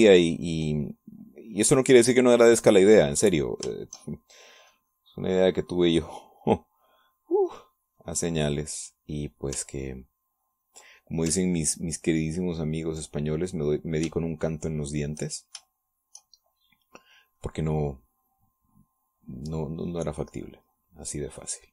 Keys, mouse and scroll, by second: 1.4-4.8 drag, 4.9-9.8 shift+drag, 11.5 ctrl+click, 13.0-14.3 ctrl+drag, 15.4-16.5 shift+drag, 16.9 shift+click, 18.4-21.7 drag.